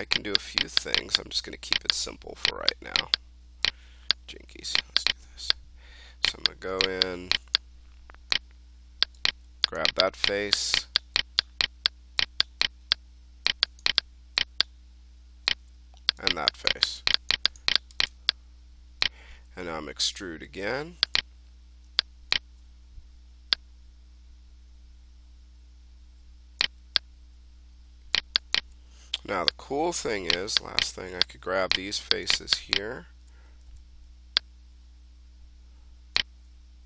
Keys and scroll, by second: 33.6 f.